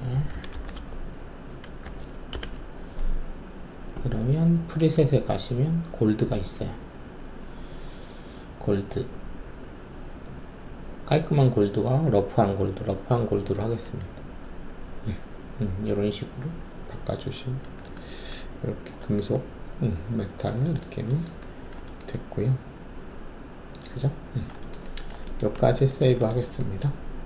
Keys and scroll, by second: 0.0-2.1 typing, 2.3 Return.